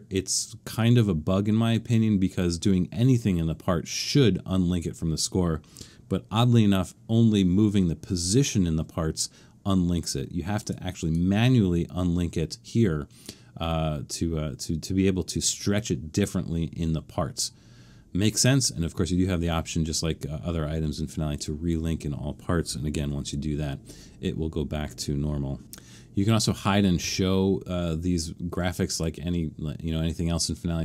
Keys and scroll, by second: 22.9 alt+super+/.